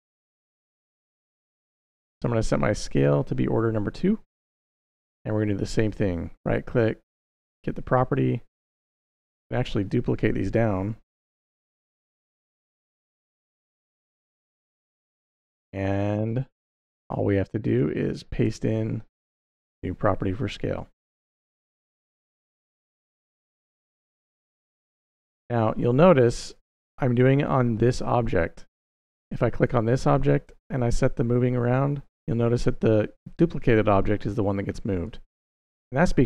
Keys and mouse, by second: 0.4 click, 2.7 click, 5.8-7.4 right drag, 8.7 click, 9.6 shift+click, 10.5 shift+d, 10.8 y, 11.9 click, 13.1-13.9 drag, 15.7-16.2 middle drag, 17.5 click, 18.3 shift+v, 19.0 click, 20.0-20.9 drag, 22.3-26.4 drag, 28.6 click, 30.4-34.9 drag, 35.5 middle click.